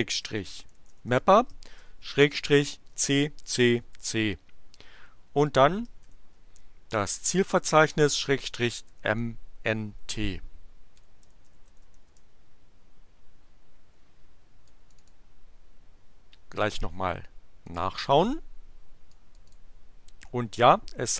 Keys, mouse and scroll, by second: 0.0-1.5 typing, 2.9 c, 5.4 space, 6.1 shift+7, 8.3-9.5 typing, 9.9 Return, 10.7-12.3 typing, 14.6 click, 17.6 click, 19.1 click.